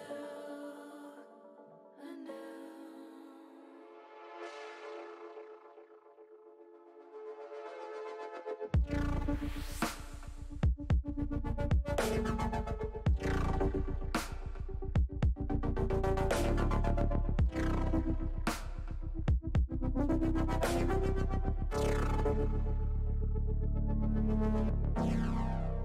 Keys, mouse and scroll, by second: 2.3-4.2 drag, 2.3-4.2 right drag, 5.3 middle click, 7.2 l, 8.0 l, 9.0 click, 9.8 middle click, 10.5 click, 12.5-15.9 middle drag, 16.5 middle click, 18.8 click, 21.1 shift+middle click, 21.8-23.9 middle drag.